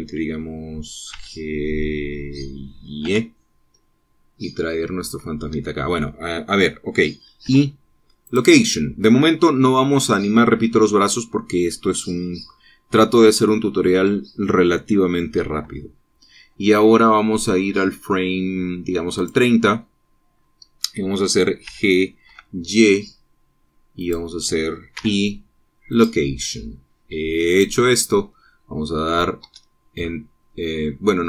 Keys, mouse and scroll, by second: 0.0 middle click, 2.2 g, 4.1 y, 6.6 Escape, 8.5 i, 9.3 click, 20.3 click, 22.7 g, 23.4 y, 25.1 click, 26.1 i, 27.0 click, 28.6 click, 30.6 space.